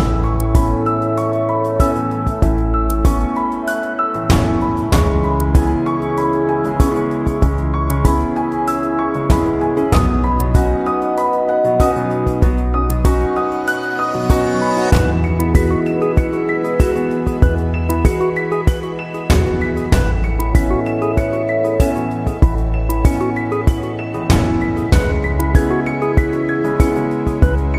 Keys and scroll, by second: 2.5 ctrl+0, 5.1 ctrl+=, 19.7 ctrl+=.